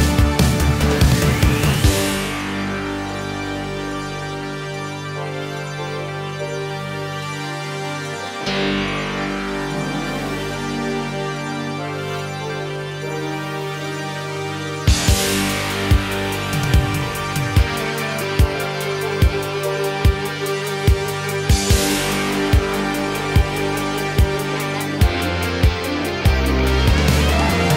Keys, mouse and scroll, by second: 0.6-2.3 typing, 3.0 Return, 3.8 ctrl+space, 4.6 click, 7.7 click, 12.7 ctrl+d, 13.9 Return, 14.1-17.7 typing, 18.0 Return, 19.3-20.7 drag, 20.9-21.6 typing, 24.9 space, 27.4-27.7 scroll up 1.